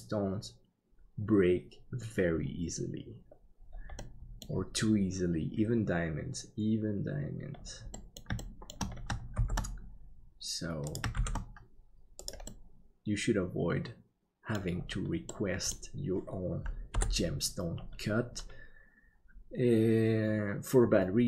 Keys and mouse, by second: 4.0 middle click, 8.0 middle click, 8.4 shift+middle click, 9.3 shift+d, 12.5-14.5 middle drag, 15.3 middle click, 16.9 KP_7.